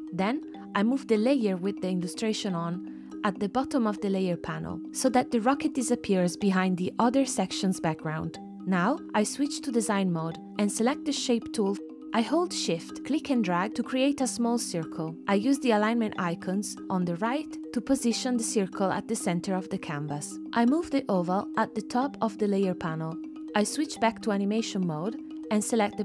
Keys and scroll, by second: 6.4 space, 13.0 super+z, 14.6 v.